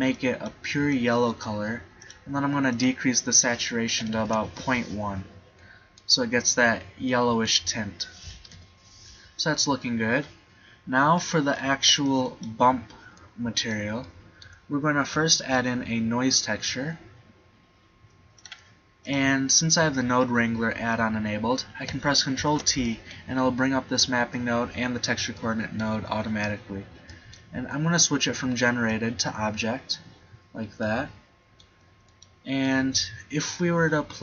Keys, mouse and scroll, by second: 8.6 KP_7, 9.1-10.7 middle drag, 11.8 b, 13.1 g, 13.7-15.3 drag, 15.4 shift+a, 22.4 ctrl+t, 25.0 middle click, 28.9 right click, 32.1-34.1 right drag.